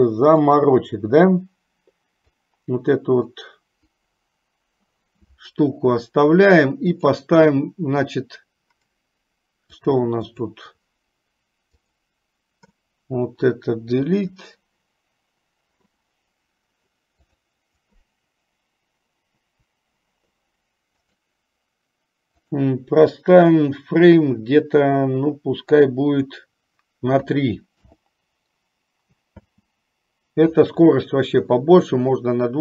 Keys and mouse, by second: 0.6 click, 2.6-3.4 drag, 7.3-10.1 drag, 10.6 click, 12.1-17.6 drag, 19.6 Delete, 21.2-28.0 drag, 29.6 space.